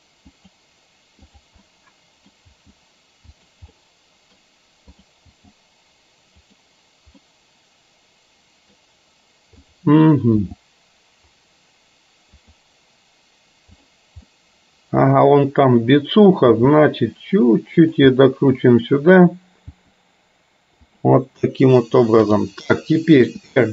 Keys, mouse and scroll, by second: 1.4 click, 1.8-2.3 middle drag, 2.6 g, 3.9 middle click, 5.0 click, 5.4 g, 7.3-8.8 middle drag, 9.6 click, 10.5 g, 14.4-15.8 middle drag, 16.6 g, 18.1-19.3 middle drag, 19.9 g, 22.4 click, 23.4 r.